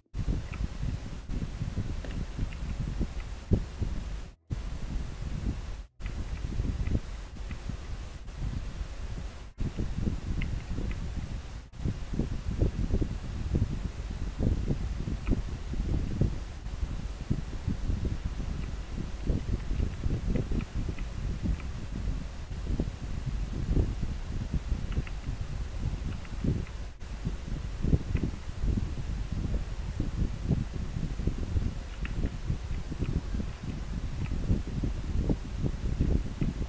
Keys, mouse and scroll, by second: 0.0 scroll down 1, 3.2 scroll up 1, 6.9 scroll up 1, 7.5 scroll down 1, 11.0 scroll up 1, 19.4 scroll down 1, 21.0 scroll up 1, 26.7 scroll up 1, 28.2 scroll down 1, 32.8 scroll down 1, 34.0 scroll up 1, 36.4 scroll up 1.